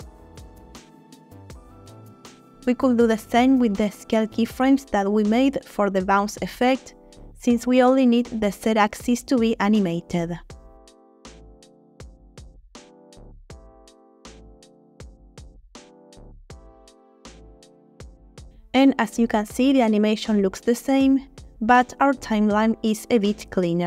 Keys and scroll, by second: 23.3 space.